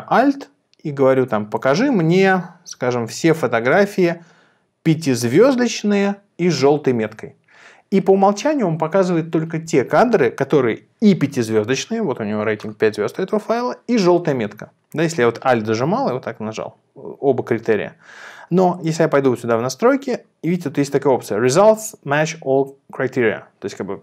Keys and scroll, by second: 2.8 5.